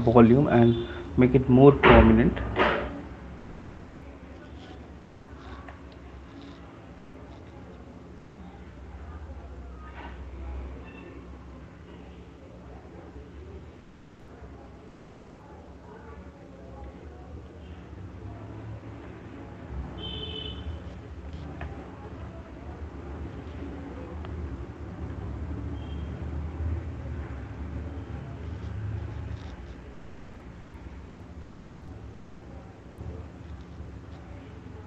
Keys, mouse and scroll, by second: 0.0-0.2 typing, 1.3 alt+click, 1.7 click, 2.4 alt+click, 2.7 click, 4.2 click, 6.0 right click, 7.4 click, 8.2 click, 9.4 click, 9.4 right click, 9.7 click, 10.4 click, 11.7 click, 11.9 click, 13.2 click, 13.7 click, 13.9 click, 15.2 click, 15.8 click, 15.8 right click, 16.6 click, 17.7 alt+click, 17.8 alt+click, 18.4 click, 19.2 alt+click, 19.2 right click, 19.9 click, 20.0 click, 21.9 right click, 22.2 alt+click, 24.1-25.3 typing, 26.4 click, 26.4 ], 26.5 ], 28.2 click, 28.4 click, 28.8 click, 29.9 click, 31.5 click, 31.7 right click, 31.9 click, 32.3 click, 34.2 click, 34.2 right click.